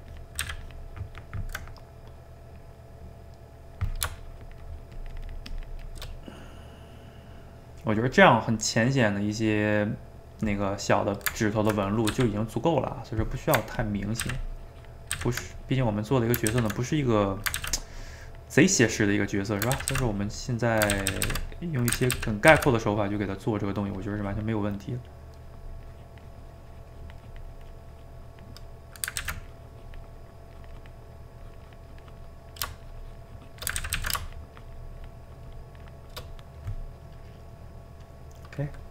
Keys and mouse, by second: 0.1 ctrl+click, 0.4 ctrl+z, 0.7 ctrl+click, 1.1-4.2 ctrl+middle drag, 4.2-6.1 shift+drag, 6.1-12.1 middle drag, 12.1 f, 13.0 middle click, 13.8 ctrl+click, 14.2 ctrl+z, 14.4 ctrl+click, 15.1 ctrl+z, 15.5 click, 16.1 middle click, 16.6 ctrl+z, 16.9 click, 17.6 ctrl+z, 17.8-19.8 drag, 19.8 ctrl+z, 19.9 ctrl+z, 20.1 click, 21.0 ctrl+z, 21.1 ctrl+z, 21.5 click, 22.0 ctrl+z, 22.1 ctrl+z, 22.5 ctrl+z, 22.9-24.7 drag, 24.7-25.9 middle drag, 25.9-28.2 drag, 28.2 middle click, 29.2 ctrl+z, 29.5 click, 30.1 middle click, 30.5 click, 31.1 middle click, 31.4 click, 32.4 middle click, 32.8 shift+click, 33.8 ctrl+z, 34.0 ctrl+z, 34.2-36.3 shift+drag, 36.3-38.9 middle drag.